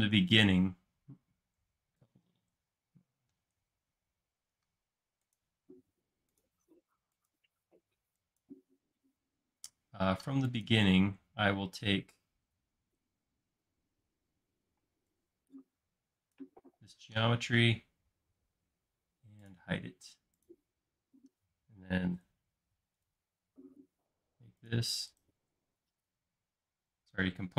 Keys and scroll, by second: 0.2 e, 14.8 space.